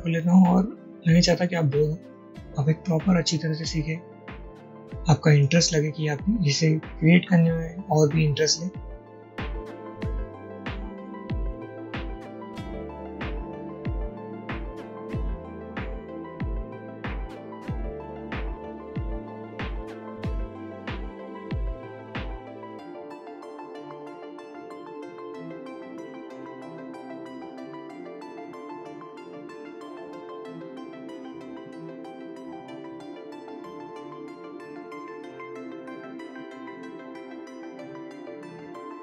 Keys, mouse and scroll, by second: 10.5 alt+click, 11.5 ctrl+y, 11.9 ctrl+y, 12.2 a, 14.0 shift+click, 14.1-14.9 typing, 15.8 ctrl+y, 17.6 ctrl+z, 17.6 click, 18.0 alt+scroll up 1, 18.3 alt+scroll down 1, 18.4 alt+scroll up 1, 19.9 ctrl+y, 21.1 shift+click, 23.0 alt+click, 23.3 a, 24.9 alt+double click, 25.0-26.0 typing, 25.4 click, 25.6 click, 26.4 click, 27.1 alt+click, 27.2 scroll down 1, 27.3-27.8 scroll up 1, 28.8 ctrl+y, 29.0 ctrl+y, 29.7 alt+click, 29.8 alt+click, 30.2-31.1 typing, 30.8-31.4 alt+scroll down 1, 31.4 click, 31.8 ctrl+y, 31.8 click, 32.2 click, 32.6 alt+scroll up 1, 33.0 alt+click, 33.2 i, 34.9 alt+click, 35.5-35.8 alt+drag, 36.6 double click, 36.6 ctrl+z, 37.8 scroll up 1, 38.3 click, 38.6 ctrl+y, 38.6 click.